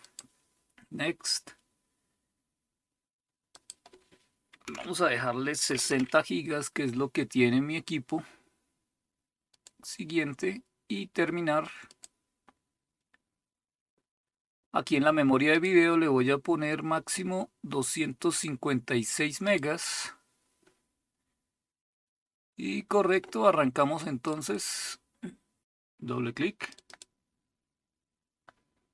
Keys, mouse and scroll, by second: 0.0 click, 3.6-4.6 drag, 4.6 Delete, 5.4-6.3 typing, 9.5 click, 11.9 click, 15.5 click, 17.1-18.4 drag, 19.4 click, 24.4 click, 26.7 click.